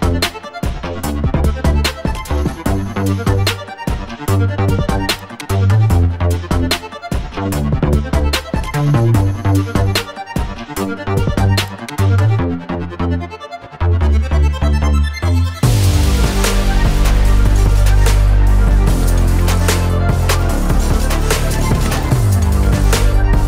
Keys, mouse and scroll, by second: 0.1-1.0 shift+middle drag, 1.2-2.2 scroll down 1, 2.6 click, 4.5-5.2 scroll down 3, 5.1-5.5 scroll up 2, 8.0 click, 8.0 scroll up 3, 9.1 scroll up 2, 10.3-10.6 drag, 10.3-10.6 scroll up 4, 10.9-11.3 scroll down 2, 12.7-15.2 drag, 12.7-13.3 scroll down 3, 15.6 click, 16.6 scroll down 2, 16.9-17.8 middle drag, 18.4-18.8 scroll up 1, 19.4-21.8 drag.